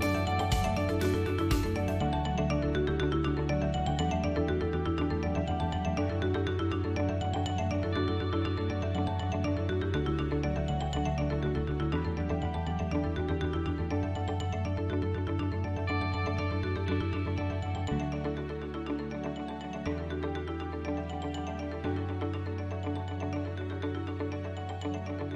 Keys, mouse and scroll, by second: 6.6 click, 7.0 middle click, 7.6-8.2 scroll down 3, 8.0 middle click, 14.2 Tab, 14.7 middle click, 15.6-16.0 scroll up 3, 16.1 shift+middle click, 17.0 click, 17.9 KP_1, 18.7 shift+middle click, 20.9 i, 22.5 e.